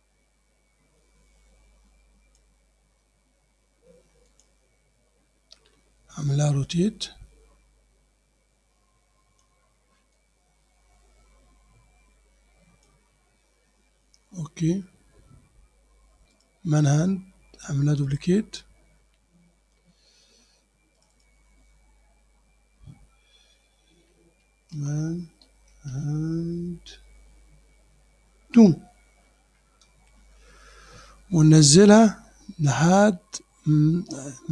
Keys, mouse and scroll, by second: 4.3 click, 6.4-9.6 drag, 10.2-13.1 drag, 15.6 Return, 16.4 click, 18.1 click, 21.0 click, 23.7-27.8 typing, 29.3 2, 29.9 Return.